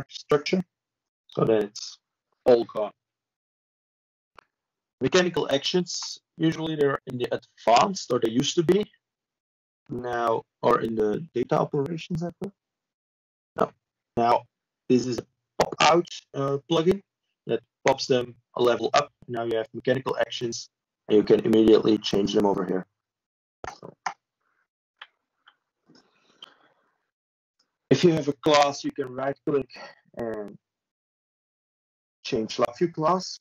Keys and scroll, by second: 5.5 ctrl+e, 7.2 ctrl+space, 8.0 ctrl+2, 9.9 ctrl+space, 10.5 ctrl+2, 13.9 ctrl+space, 14.4 ctrl+2, 16.4 ctrl+m, 21.2 ctrl+m, 21.9 Escape.